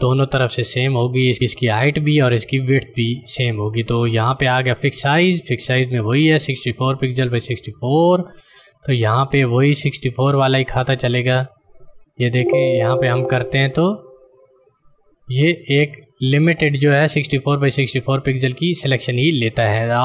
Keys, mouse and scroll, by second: 7.8 click.